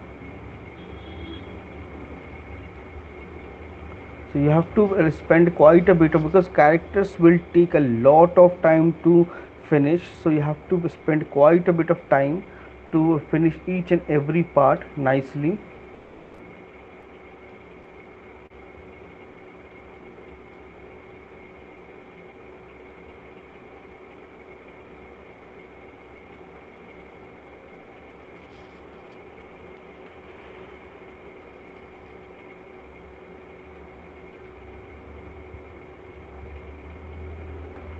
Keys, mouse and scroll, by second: 0.9 click, 1.3 click, 2.7 click, 4.0 shift+click, 4.6 click, 4.9 shift+click, 6.3 shift+click, 11.7 click, 13.1 middle click, 13.1 click, 13.7 click, 13.9 click, 14.1 click, 14.7 click, 17.1 middle click, 17.1 shift+click, 17.5 click, 18.0 click, 18.6 shift+click, 18.8 click, 20.3 shift+click, 20.4 click, 20.6 shift+click, 21.8 click, 22.3 shift+click, 23.4 click, 25.3 click, 26.9 click, 28.5 click, 28.8 shift+click, 30.0 right click, 31.0 right click, 32.1 shift+click, 33.0 alt+click, 33.9 shift+click, 34.8 alt+click, 36.8 click, 37.6 alt+click, 37.9 right click.